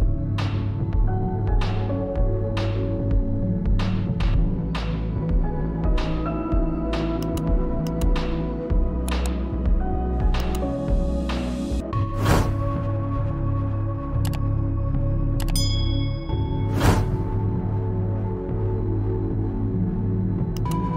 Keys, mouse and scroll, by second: 4.7 click, 6.3 right click, 7.6 click, 9.2-10.5 typing, 19.3 click.